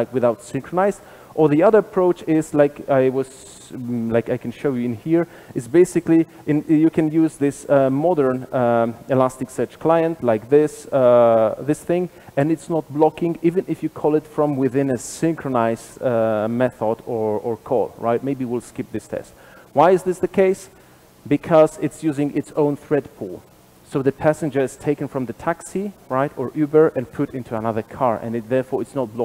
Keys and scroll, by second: 10.1 super+b.